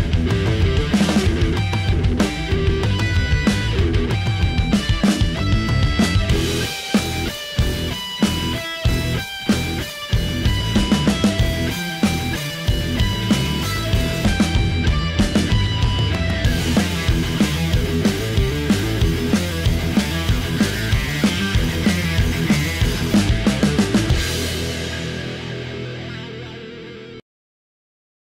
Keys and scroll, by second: 23.5 v.